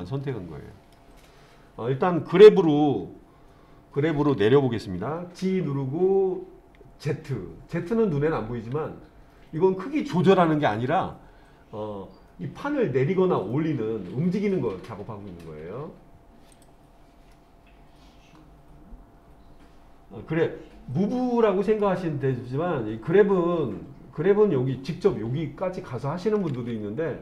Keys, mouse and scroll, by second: 5.4 g, 16.5 click, 17.4-21.9 middle drag.